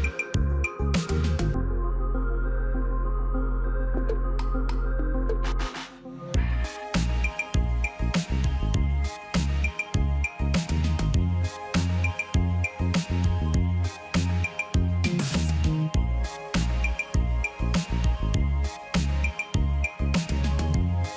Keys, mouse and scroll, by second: 1.4 5, 7.9 ctrl+a, 11.1 ctrl+a, 19.3 ctrl+d, 21.0 ctrl+click.